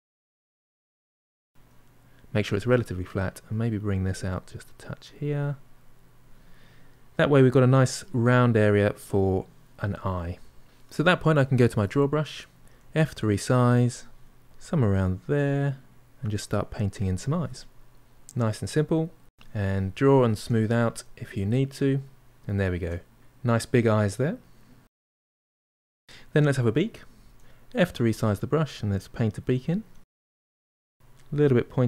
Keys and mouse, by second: 0.4 middle click, 0.7 shift+click, 1.5 f, 3.2-6.3 drag, 6.3-10.6 middle drag, 11.0-12.0 drag, 12.0 f, 12.8 middle click, 13.2 f, 13.6 middle click, 14.0-15.2 drag, 15.2-16.8 middle drag, 17.1 ctrl+middle click, 17.7-19.9 drag, 19.9 middle click, 20.8-22.0 drag, 22.0-25.7 middle drag, 27.0 f, 28.5-30.0 drag, 30.0 middle click, 30.8 click, 31.2 middle click.